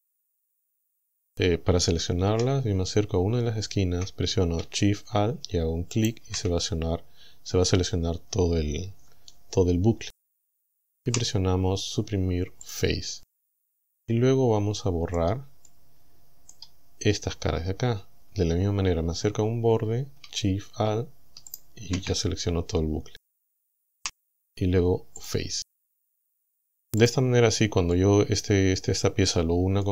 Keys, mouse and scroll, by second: 2.4 a, 6.0 alt+shift+right click, 11.1 Delete, 12.7 click, 14.1-15.4 middle drag, 15.7-16.7 middle drag, 21.5 alt+shift+right click, 24.0 Delete, 25.2 click, 27.0 click, 27.9-29.9 middle drag.